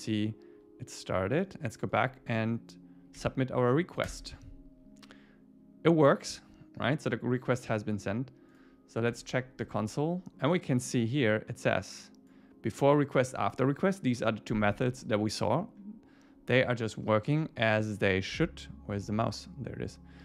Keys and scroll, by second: 3.2 Up, 4.1 Return, 9.2 super+1.